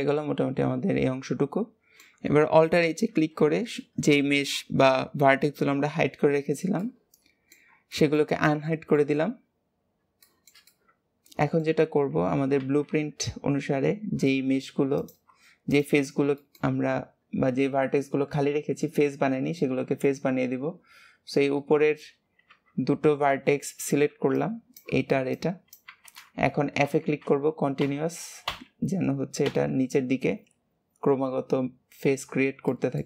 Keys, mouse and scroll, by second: 3.0 alt+h, 6.7-11.8 middle drag, 11.8 alt+z, 12.5 alt+z, 12.9 KP_3, 14.1-14.9 scroll up 2, 14.9 click, 15.7 shift+click, 16.3 shift+middle click, 16.8 scroll up 2, 32.6-33.0 shift+middle drag.